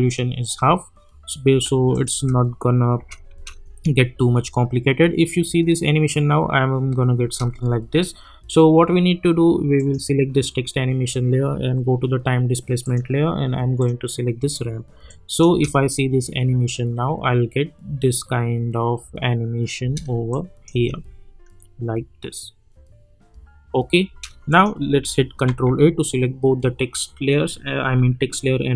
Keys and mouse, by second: 1.9 click, 2.1 space, 7.2 space, 9.7 click, 12.8 click, 15.5 space, 17.9 -, 20.0 space, 20.3 click, 20.7 space, 24.0 space, 24.5 click, 25.4 ctrl+a.